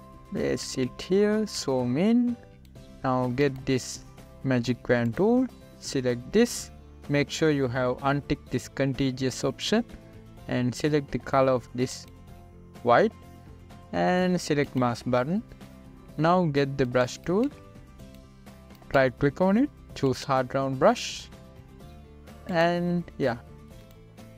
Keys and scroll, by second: 2.2 z.